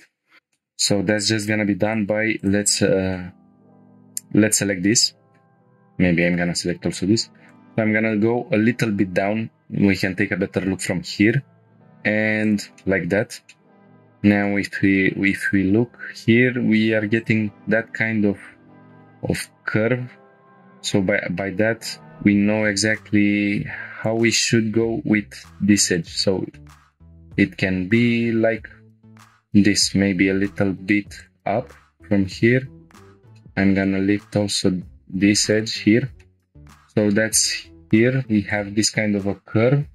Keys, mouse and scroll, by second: 0.4 shift+middle click, 0.4 scroll down 2, 0.5 middle click, 1.3 scroll up 1, 1.9 click, 2.4 shift+click, 2.8-3.2 middle drag, 4.5 scroll up 1, 4.9-5.4 shift+drag, 4.9 shift+middle click, 6.3 g, 6.6 z, 7.5 click, 7.7-9.3 middle drag, 10.0 g, 10.3 y, 12.4 click, 12.8-13.4 middle drag, 13.5-14.5 shift+middle drag, 13.7 scroll down 2, 14.7 scroll up 1, 15.5 g, 15.7 z, 17.1 click, 17.5 g, 18.2 y, 19.4 click, 20.1 scroll down 1, 20.4-21.2 shift+middle drag, 20.4 scroll up 1, 22.0 g, 22.4 z, 24.0 click, 24.4 g, 24.6 y, 25.9 click, 26.2 scroll down 1, 26.5 shift+middle click, 26.9-28.1 middle drag, 28.1-28.6 drag, 28.8-29.6 scroll up 1, 29.6 g, 29.7 z, 31.2 shift+click, 31.5 middle click, 33.1 click, 33.4 middle click, 34.5 g, 34.7 z, 35.5 shift+click, 35.9 scroll down 1, 36.2-37.4 shift+middle drag.